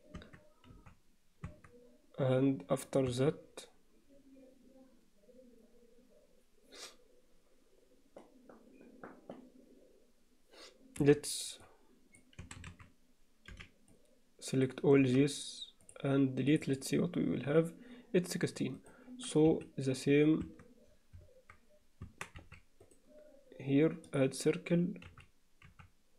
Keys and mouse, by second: 0.2 Tab, 0.7 z, 1.5 Tab, 2.9 click, 3.1 Tab, 11.0 b, 12.4 a, 13.5 b, 15.0 x, 16.5 click, 20.5 Tab, 22.2 Tab, 22.4 z, 23.0-24.2 right drag, 25.1 z, 25.7 z.